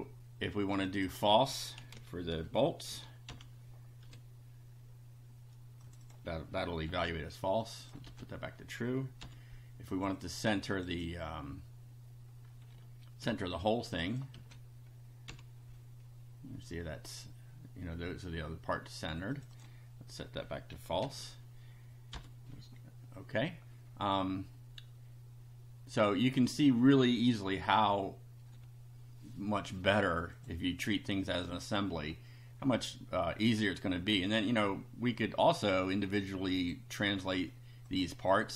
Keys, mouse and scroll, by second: 0.7 click, 1.5-3.2 typing, 3.3 F5, 5.9 click, 6.8 ctrl+c, 7.6 click, 8.1 ctrl+v, 9.2 F5, 9.9 click, 10.7 click, 13.2 ctrl+c, 13.9 click, 14.3 ctrl+v, 15.3 F5, 19.3 click, 21.1 ctrl+z, 22.1 F5, 23.8 scroll up 2, 26.7 click, 30.3 click, 31.0 click, 34.3 click, 35.5-36.8 drag, 37.9 click, 38.3 click.